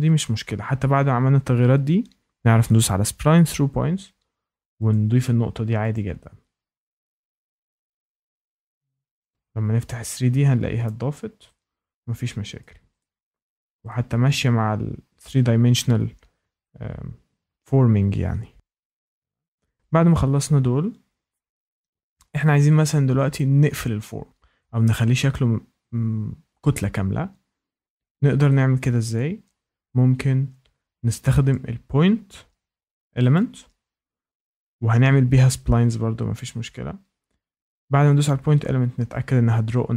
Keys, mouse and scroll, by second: 2.7 click, 4.9 click, 5.9 click, 6.8 Escape, 9.2 click, 10.1 Escape, 10.8 click, 12.5 shift+middle click, 13.6 shift+middle click, 19.3 shift+middle click, 20.4 scroll up 1, 22.0 scroll up 1, 22.0 scroll, 24.8 shift+right click, 31.0 shift+middle click, 33.3 click.